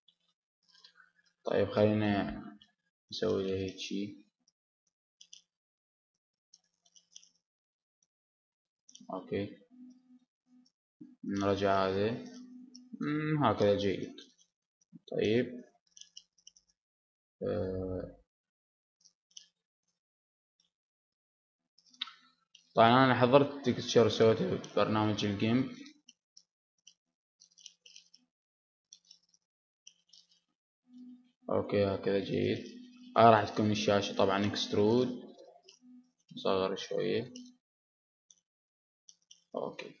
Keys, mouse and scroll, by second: 0.7-2.5 drag, 1.9 e, 2.5-4.0 right drag, 2.6 s, 4.3-7.0 drag, 6.1 e, 7.1-8.3 drag, 7.3 s, 11.1 middle click, 11.8 click, 13.1 middle click, 14.1 middle click, 14.9-16.4 middle drag, 16.1 e, 16.4-18.2 drag, 17.6 s, 19.9-21.9 drag, 22.8 right click, 23.7 middle click, 24.5-25.5 drag, 25.5-27.3 middle drag, 27.9-29.1 drag, 29.7-32.5 middle drag, 32.5 click, 32.9-34.3 middle drag, 34.0 e, 34.3 right click, 34.6 s, 35.7-37.7 middle drag, 38.7-40.0 drag, 39.7 e.